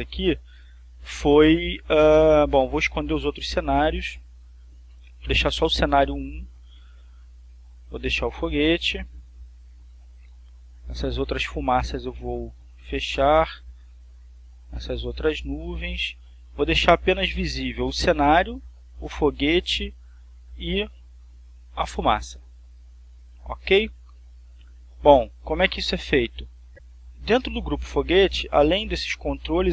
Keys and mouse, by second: 3.3 click, 5.0 click, 5.7 click, 8.9 click, 11.1 click, 14.6 click, 16.7 click, 26.6 click, 27.3-28.5 drag.